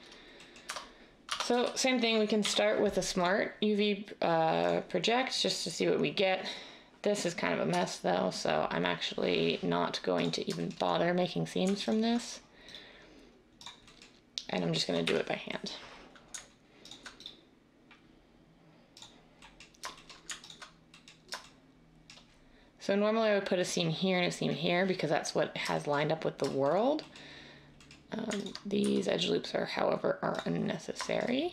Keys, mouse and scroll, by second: 0.6 Tab, 1.2 Tab, 1.4 a, 2.4 u, 7.8 Tab, 15.0 \, 28.8 x.